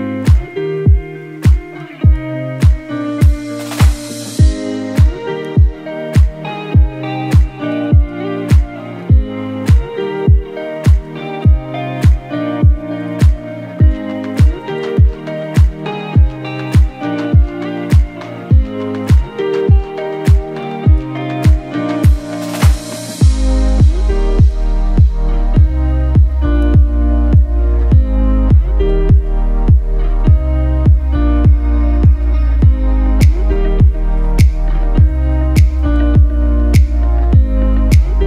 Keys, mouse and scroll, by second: 6.6 click, 17.0 ctrl+z, 20.2 click, 26.9 click, 32.2 ctrl+z, 35.0 click, 37.1 scroll up 1.